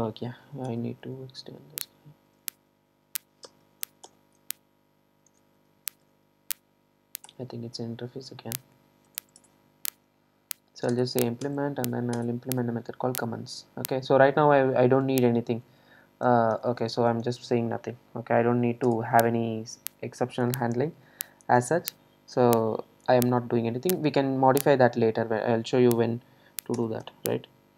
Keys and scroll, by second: 0.5 super+e, 4.1 super+e, 10.9 alt+Return, 18.7 super+e.